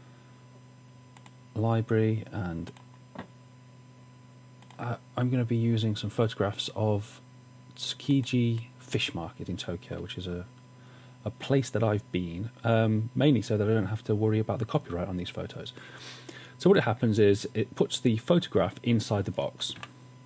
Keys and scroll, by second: 19.8 w.